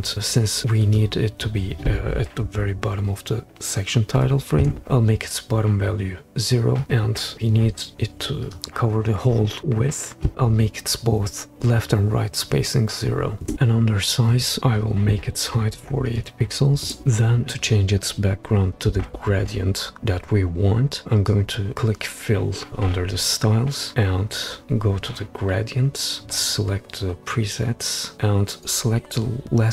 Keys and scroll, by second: 4.2 0, 4.6 Return, 7.3 Return, 7.3 0, 12.5 0, 13.4 Return, 15.7-16.1 typing, 16.8 Return.